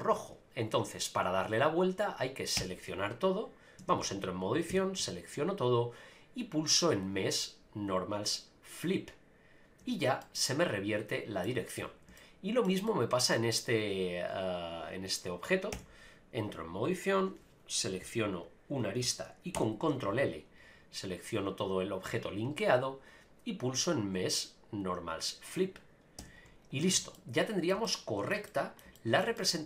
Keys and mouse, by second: 2.6 Tab, 3.8 Tab, 4.0 Tab, 4.7 a, 7.1-9.0 drag, 9.8 Tab, 10.2-11.4 middle drag, 12.2 shift+middle click, 12.8-13.3 middle drag, 15.7 Tab, 19.5 ctrl+l, 23.9-25.5 drag, 26.2 Tab, 26.8 a, 26.9 a, 27.1-27.7 middle drag, 27.8-28.3 shift+middle drag, 28.4 middle click, 28.9 shift+middle drag, 29.3-29.6 middle drag.